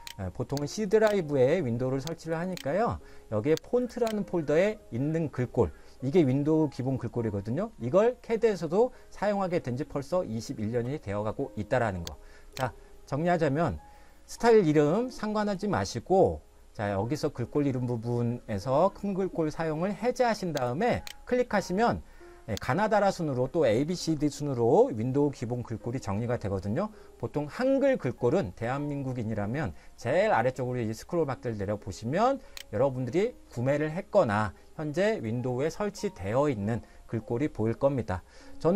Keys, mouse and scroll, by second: 0.9 click, 1.0 double click, 2.3 click, 2.5 double click, 3.9 click, 4.0 double click, 12.7 click, 20.7 click, 22.9 click.